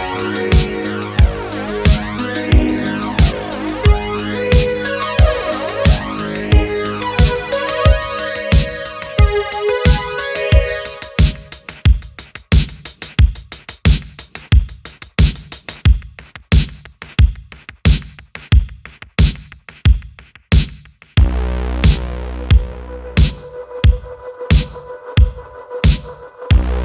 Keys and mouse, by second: 1.0-4.0 drag, 4.8 middle click, 7.0-7.8 drag, 8.7-9.6 drag, 10.1 middle click, 11.0-11.3 middle drag, 11.7 click, 12.5 r, 13.6 Escape, 14.2 middle click, 14.7 click, 16.3 click, 17.2-17.7 middle drag, 18.2 click, 18.7 r, 20.2 Escape, 20.6-21.0 middle drag, 21.4 shift+middle drag, 21.6-22.0 middle drag, 22.3 ctrl+s, 23.2 middle click, 23.9 middle click, 24.8-25.9 drag.